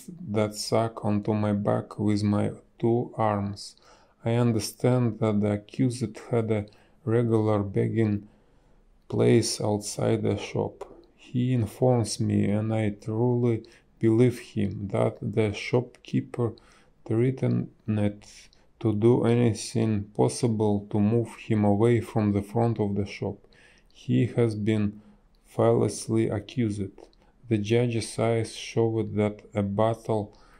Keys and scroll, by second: 4.3 space, 5.3 space, 6.2 b, 6.7 space, 14.3 space, 23.6 space, 29.1 space.